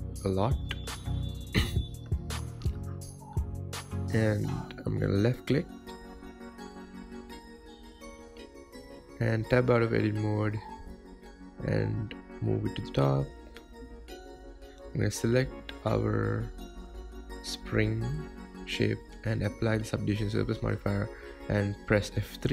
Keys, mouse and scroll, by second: 9.5 Tab, 10.0 scroll down 4, 10.7 shift+middle click, 11.3-11.7 scroll up 3, 11.7 g, 13.0-15.8 shift+middle drag, 15.8 click, 20.6 click.